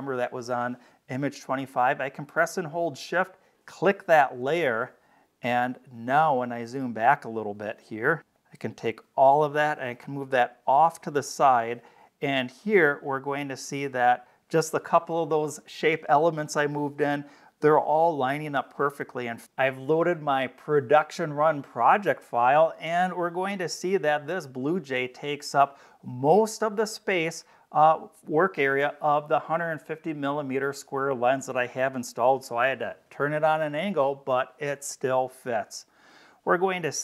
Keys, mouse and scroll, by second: 3.6 shift+click, 4.8-5.4 scroll down 4, 7.0 scroll down 1, 8.2-9.8 drag, 10.4-11.6 scroll up 4, 12.0-12.5 scroll up 4, 18.5-19.4 scroll up 4.